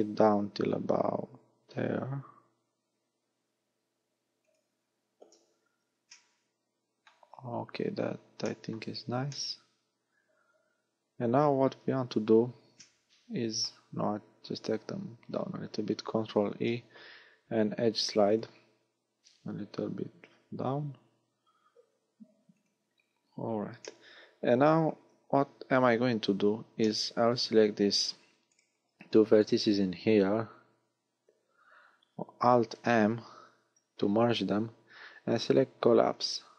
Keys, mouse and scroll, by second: 4.5 click, 5.3 KP_1, 6.1 shift+middle click, 7.6-8.0 scroll up 4, 8.4 shift+middle click, 9.4 middle click, 12.0-12.8 scroll up 5, 12.8 shift+middle click, 16.2 ctrl+e, 22.6 click, 23.8 middle click, 25.7 z, 26.1-26.5 scroll up 4, 26.8 shift+middle click, 27.7 scroll up 1, 28.5 right click, 29.4 shift+right click, 33.5 alt+m.